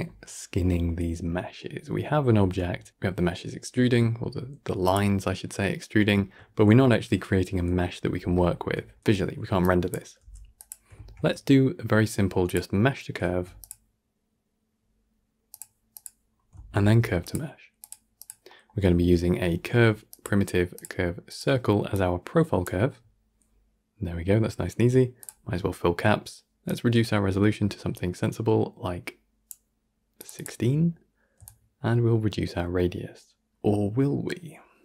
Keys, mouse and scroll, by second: 4.8 click, 5.6-10.4 middle drag, 10.4 click, 15.5 shift+a, 17.8 shift+a, 22.5 click, 25.1 click, 26.8-34.7 drag, 34.7-34.8 middle drag.